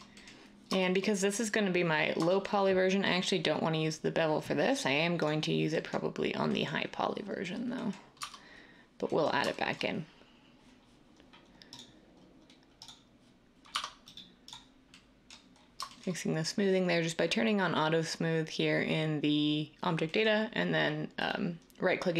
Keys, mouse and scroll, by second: 8.2 Tab, 13.7 Tab.